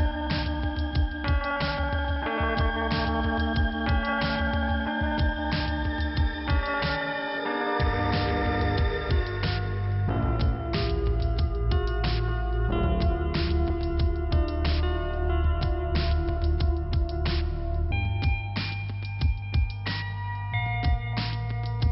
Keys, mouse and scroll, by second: 0.6 click, 0.7 click, 1.4 right click, 1.8-2.3 scroll down 1, 2.5 scroll up 1, 4.0 click, 4.7 click, 5.3 click, 5.8 click, 8.1 click, 8.2 click, 9.4 click, 11.4 click, 11.5 click, 12.3 click, 13.5 click, 13.9 click, 15.7 click, 15.8 click, 16.2 click, 19.3 click.